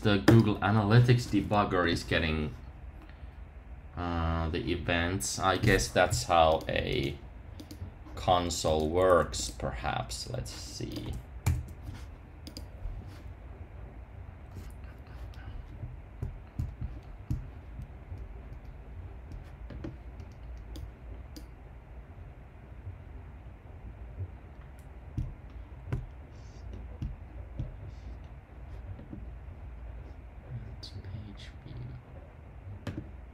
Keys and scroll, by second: 11.4 super+k.